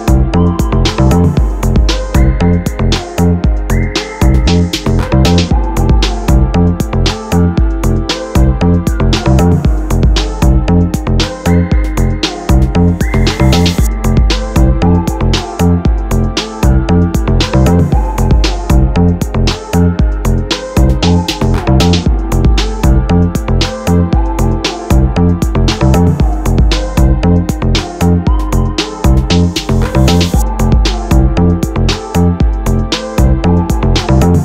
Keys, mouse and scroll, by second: 0.1-0.6 scroll up 1, 0.6 a, 0.8 `, 1.1 Escape, 1.7 ctrl+b, 6.3 ctrl+click, 6.4 ctrl+click, 7.1 Tab, 7.2 click, 7.5 click, 7.6 click, 7.7 click, 7.9 click, 8.5 Tab, 8.9 click, 10.2 scroll down 1, 10.4 click, 10.8 Tab, 10.9 click, 11.2 click, 11.5 click, 11.7 click, 11.9 click, 12.1 Tab, 12.9-13.6 scroll up 2, 13.6 1, 14.1 scroll up 2, 14.2 ctrl+b, 17.6 click, 17.7-19.1 middle drag, 19.1 click, 19.2 shift+click, 19.7 ctrl+b, 20.6 click, 20.8 shift+click, 21.1 ctrl+b, 22.2 click, 22.3-22.9 scroll down 3, 22.4 Tab, 22.9-25.3 middle drag, 24.8-25.2 scroll up 2, 25.2 scroll down 1, 25.3-27.6 drag, 25.9 ctrl+z, 26.8 g, 27.8 ctrl+b, 29.2 click, 29.4-34.0 middle drag, 29.7 scroll down 1, 29.8 Tab, 30.1 Tab, 30.7 a, 34.0 click.